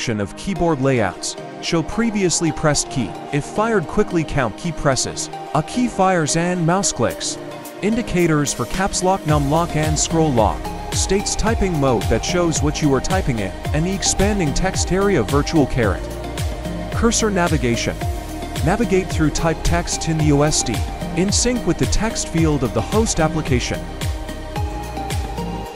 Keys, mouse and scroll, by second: 14.2 Return.